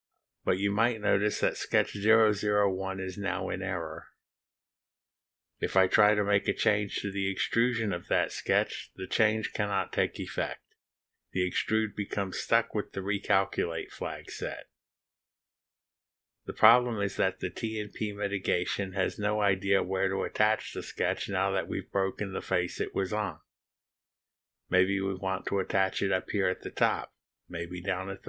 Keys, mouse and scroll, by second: 1.4-3.9 drag, 6.5 click, 10.9 click, 11.4 scroll down 2, 12.1-12.8 scroll down 2, 13.1-13.5 scroll down 2, 14.2 scroll down 1, 15.3 click.